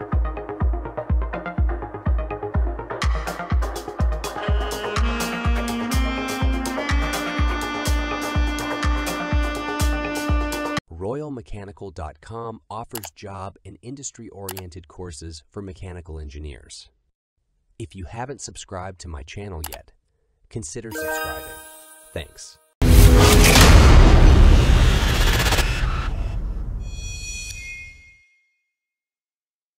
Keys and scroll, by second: 1.1 ctrl+s.